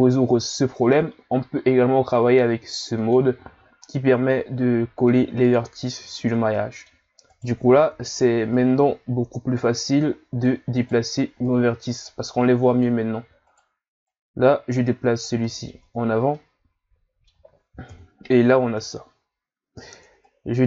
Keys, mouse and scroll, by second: 3.0 click, 3.9-6.2 middle drag, 6.2-6.6 scroll down 2, 6.6 middle click, 7.3 right click, 7.8 middle click, 8.5 click, 10.8 right click, 11.4 click, 13.4 right click, 14.1 click, 15.4 middle click, 15.8 Tab, 16.4-17.9 middle drag, 17.9 KP_1, 18.9 Tab, 19.1-20.2 scroll up 3, 20.2 click.